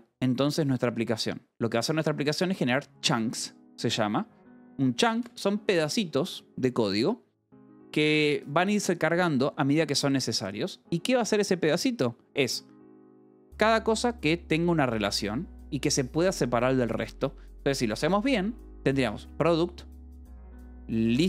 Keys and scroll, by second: 5.6 shift+v, 17.6 Escape, 19.5 shift+v, 20.0 Escape, 20.1 j, 21.0 j.